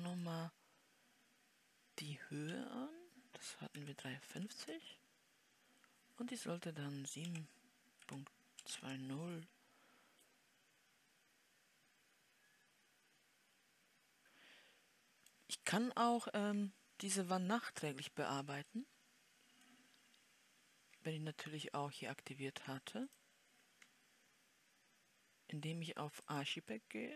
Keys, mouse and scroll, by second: 7.5 KP_7, 8.3 ., 9.1 KP_0, 14.2-27.1 middle drag.